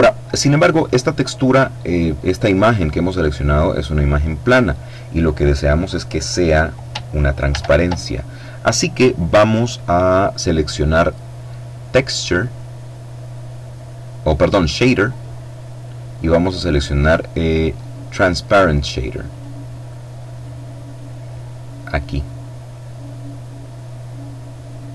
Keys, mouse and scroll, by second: 6.9 shift+a, 18.6 click, 19.8-24.9 drag.